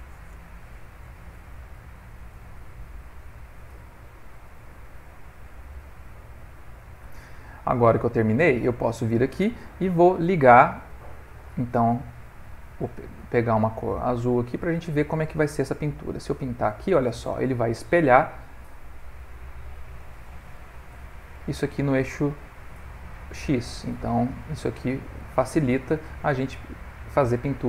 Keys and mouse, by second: 7.7 click, 7.8 middle click, 8.7 ctrl+middle click, 10.5 click, 11.9 click, 13.0 f, 15.9 click, 16.8 middle click, 18.5 click, 20.6 ctrl+middle click, 21.9 click, 22.6 click, 23.1 click, 23.7 click, 24.6 click, 25.2 click, 25.8 click, 26.3 middle click.